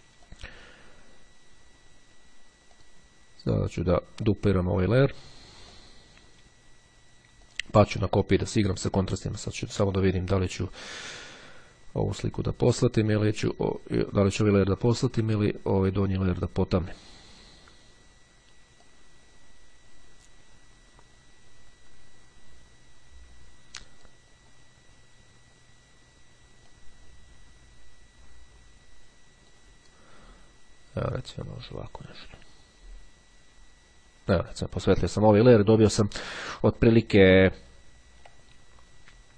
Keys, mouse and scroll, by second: 0.3 click, 2.1-3.5 drag, 5.5-6.5 drag, 6.9-8.1 drag, 9.2 click, 13.3-16.7 drag, 18.7-24.5 drag, 26.4-30.1 drag, 31.1-34.7 drag, 37.7-38.3 ctrl+scroll up 2.